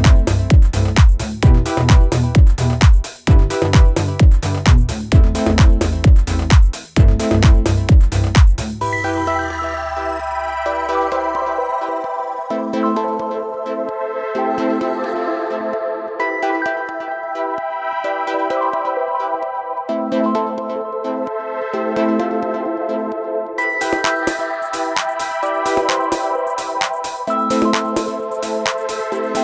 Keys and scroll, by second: 0.5 ctrl+z, 2.0 ctrl+z, 3.9 ctrl+z, 9.3 ctrl+z, 21.9 ctrl+-, 22.7 ctrl+-, 23.3 ctrl+-, 26.0 ctrl+=, 26.1 ctrl+=, 26.2 ctrl+=, 27.7 ctrl+z, 27.9 ctrl+z.